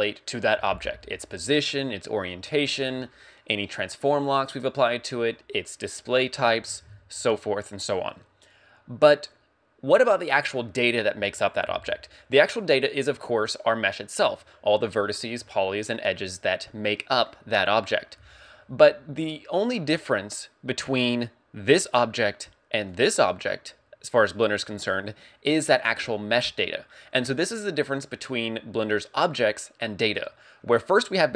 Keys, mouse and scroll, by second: 22.9 right click, 31.0 right click.